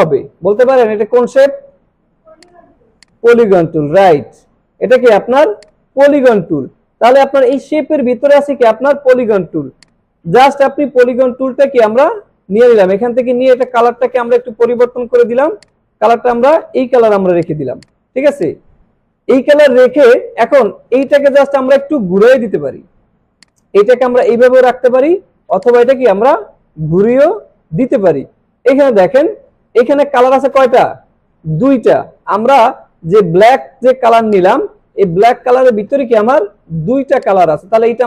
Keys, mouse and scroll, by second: 0.9 alt+scroll down 1, 1.4 click, 2.0 alt+scroll up 1, 2.4 click, 3.0-5.2 alt+drag, 5.4 space, 5.6 click, 5.9 space, 7.5 right click, 9.7-13.5 drag, 17.8 click, 18.4-19.7 drag, 20.3 alt+scroll up 1, 20.9-21.5 alt+drag, 22.4 ctrl+z, 22.9 alt+scroll down 1, 23.4-25.1 drag, 28.8 click, 33.4 click, 34.3-35.8 drag.